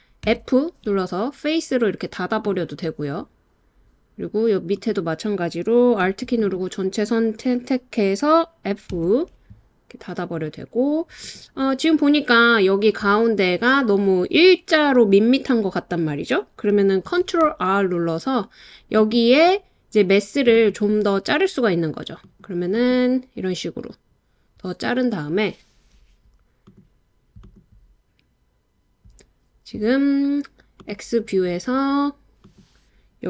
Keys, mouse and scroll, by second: 0.3 f, 4.7 click, 6.4 click, 8.9 f, 17.3 super+r, 20.5 right click, 22.3 click, 22.8 click, 26.6 click, 27.4 click, 30.7 click.